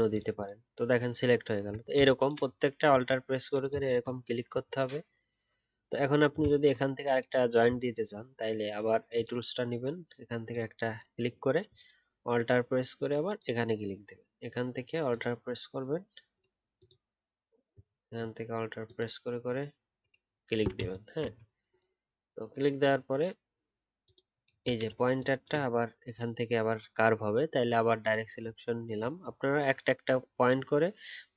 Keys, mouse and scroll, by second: 0.4-0.9 alt+scroll down 1, 0.9 alt+scroll up 1, 1.5-2.0 alt+scroll down 1, 6.5-7.4 alt+scroll up 1, 13.2 alt+click, 24.4 alt+scroll down 1, 28.7-29.1 alt+scroll up 1, 29.4 alt+scroll down 1.